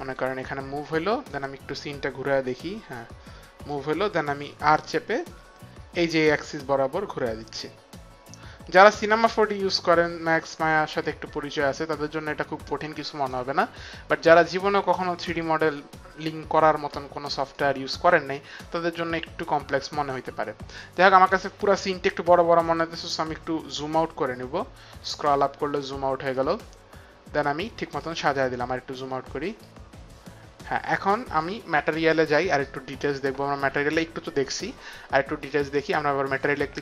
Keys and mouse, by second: 1.3 right click, 4.6 r, 6.5 click, 11.0 right click, 15.3 middle click, 17.5 right click, 19.1 middle click, 26.3 middle click, 29.6 middle click, 35.7 click.